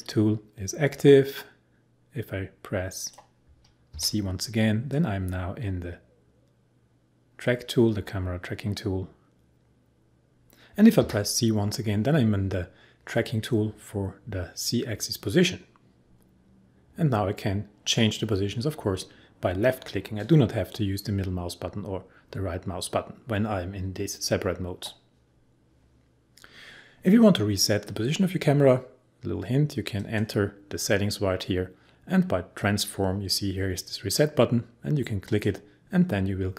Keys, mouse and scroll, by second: 0.1-3.9 drag, 3.9 c, 4.9-10.3 drag, 11.0 c, 13.1-23.1 drag.